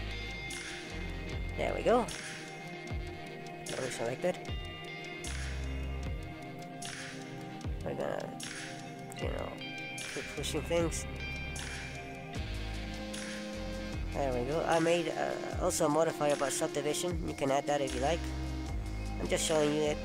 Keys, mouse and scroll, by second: 0.5 right click, 4.0 middle click, 6.1 click, 9.1 middle click, 15.0-16.1 scroll down 4, 16.1-18.3 scroll down 1, 18.3 click, 18.3 scroll down 1, 19.1 middle click.